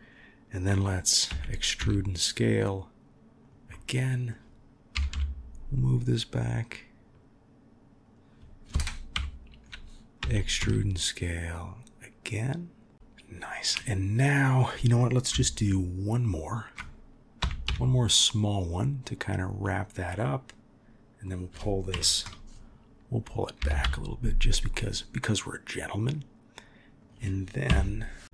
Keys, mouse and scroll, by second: 1.3 e, 3.7 middle click, 9.1 KP_1, 10.2 e, 12.9 KP_1, 14.8 click, 20.0-21.2 middle drag, 21.9 KP_3, 23.6 g, 27.7 KP_1.